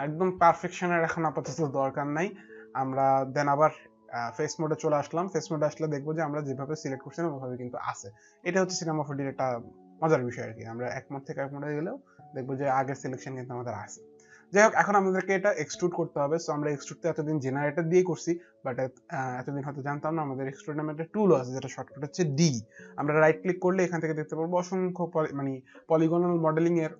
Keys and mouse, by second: 2.6 middle click, 3.3 click, 5.2 alt+click, 10.5 alt+click, 22.6 right click.